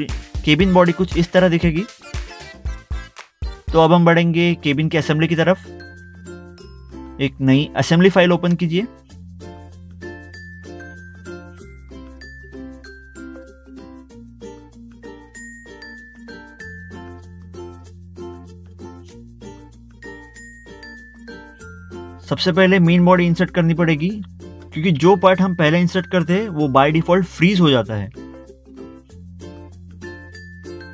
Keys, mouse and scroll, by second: 0.2 middle click, 0.4 scroll down 1, 0.7 middle click, 1.1 middle click, 1.1 scroll up 1, 1.5 middle click, 1.9 middle click, 7.5 click, 11.3 click, 15.2 click, 16.5 scroll down 1, 16.9 scroll up 1, 18.2 scroll up 1, 19.4 click, 19.5 double click, 22.1 click, 24.0 middle click, 24.9 middle click, 25.0 scroll down 1, 29.6 click.